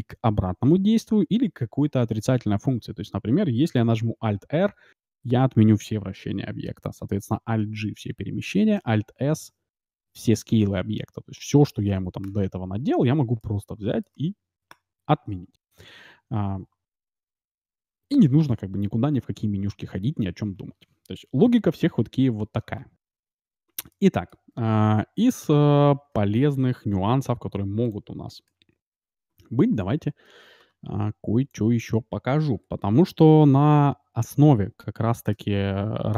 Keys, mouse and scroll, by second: 4.1 alt+r, 7.4 alt+g, 8.7 alt+s, 10.8 middle click, 11.1-11.9 scroll up 1, 11.9-12.9 scroll up 1, 12.2 KP_Decimal, 12.9-13.3 scroll down 1, 13.3 middle click, 14.0-14.9 scroll up 1, 14.9-15.3 scroll up 1, 22.7-23.8 middle drag, 23.8-24.2 scroll up 1, 24.2-25.7 middle drag, 26.0 shift+d, 28.8-30.0 shift+r, 31.0 a, 31.3 b, 35.2 shift+d.